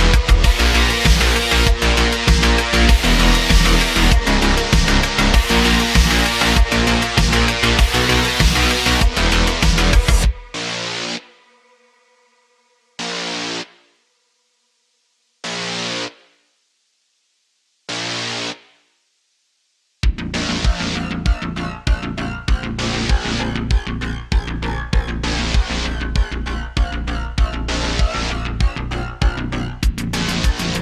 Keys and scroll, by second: 4.1 Tab, 5.0 Tab, 15.5 Tab, 16.2 g, 17.8 g, 18.2 y, 20.5 g, 20.6 y, 22.1 Tab, 28.7 Tab, 29.5 /, 29.8 /, 30.4 shift+d, 30.6 y.